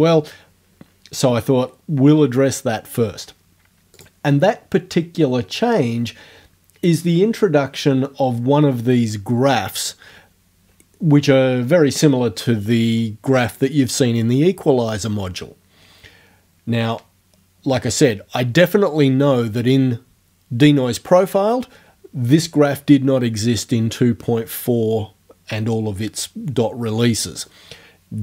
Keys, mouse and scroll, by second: 4.0 click.